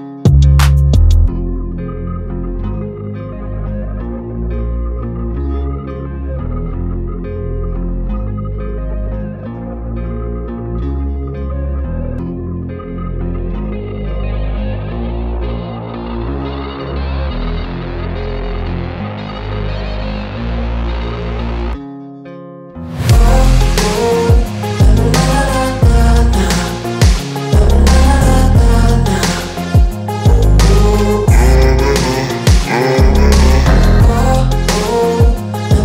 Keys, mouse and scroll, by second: 0.0 a, 0.1 s, 2.5 2, 2.8 click, 3.1 g, 5.2 click, 6.1 a, 6.2 s, 7.6 scroll up 1, 7.8 g, 10.2 shift+click, 10.7 Tab, 11.2 g, 11.9-12.2 scroll down 4, 12.4 drag, 12.7 shift+right click, 12.8 shift+a, 22.6 r, 23.6 r, 24.6 g, 26.4-27.0 scroll up 2, 27.0 Tab, 27.1-29.5 typing, 29.2 Tab, 32.0 g, 32.7 KP_3, 33.0-33.3 scroll up 7, 33.3 g, 35.7 KP_0.